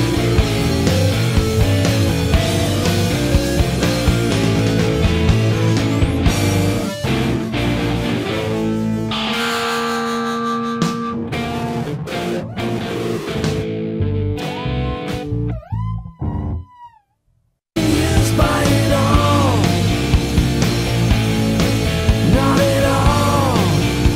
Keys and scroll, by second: 11.1 scroll, 19.3 2, 19.7 Return, 23.5-23.8 typing, 24.0 Return.